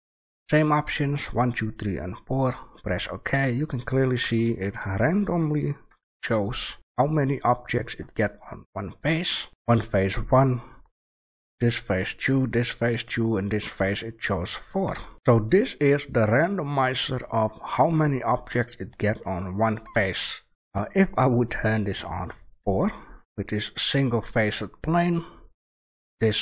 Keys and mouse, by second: 3.5-6.7 middle drag, 8.3-12.2 middle drag, 13.7-15.1 middle drag, 15.1 shift+a.